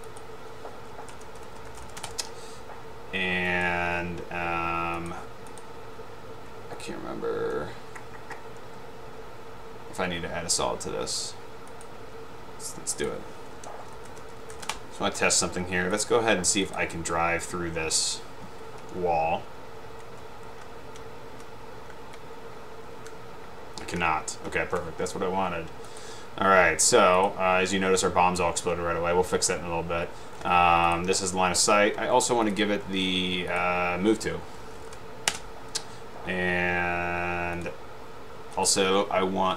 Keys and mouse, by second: 0.3 click, 1.2-2.3 typing, 3.7-4.2 drag, 11.9 click, 13.1 click, 13.9-15.1 typing, 16.8 click, 20.8 Up, 21.4 Right, 22.2 Left, 22.6 Right, 23.8 Left, 24.6 Left, 24.8 Right, 26.0 click, 27.3 click, 33.6 click, 34.5-35.5 typing, 37.7 click.